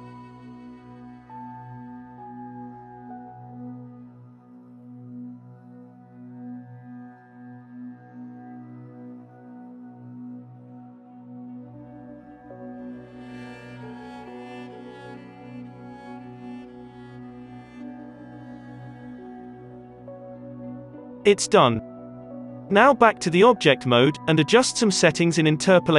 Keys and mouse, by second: 0.8-1.8 drag, 1.8 f, 5.8 alt+a, 6.4 f, 7.7-10.6 typing, 8.5-19.6 drag, 13.6 ctrl+z, 13.7 f, 14.3 f, 15.0 ctrl+z, 17.7 f, 18.8 ctrl+z, 18.9 f, 21.0 alt+a, 21.3 z, 22.9 KP_1, 23.4 KP_5, 24.2 KP_7, 25.0 ctrl+s, 25.0-25.9 drag.